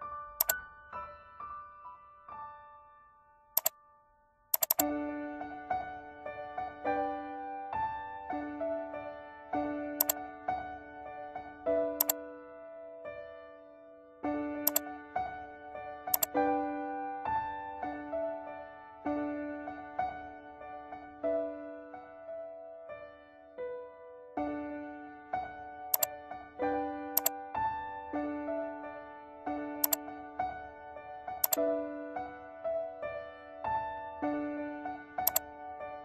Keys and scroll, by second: 2.7 ctrl+g.